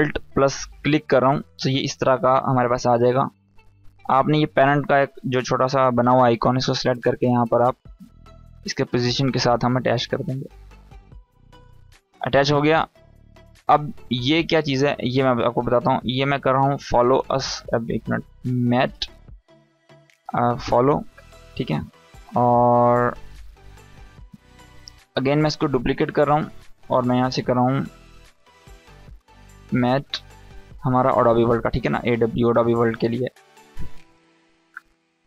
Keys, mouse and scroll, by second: 0.3 alt+click, 6.2-6.8 drag, 14.6 Return, 15.5-17.2 typing, 18.3-23.4 typing, 24.3 click, 25.4 ctrl+d, 26.6 Return, 28.2-29.8 typing, 30.8 shift+a, 31.6 shift+w, 33.7 click.